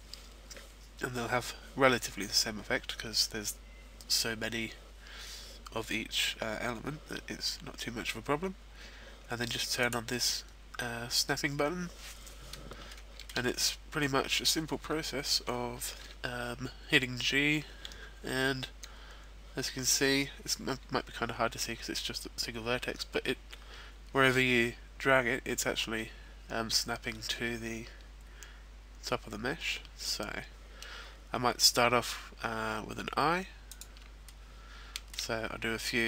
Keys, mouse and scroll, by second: 9.8 click, 12.9 shift+middle click, 13.4-14.7 scroll up 3, 13.9 middle click, 17.6 g, 33.8 click, 34.0 shift+middle click, 35.3-35.8 scroll up 3, 35.8 scroll down 1.